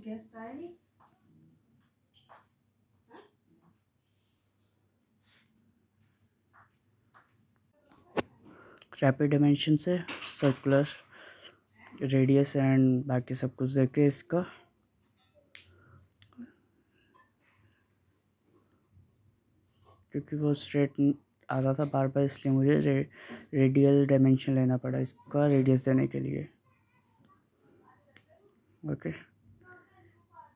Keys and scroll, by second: 25.6-26.7 typing.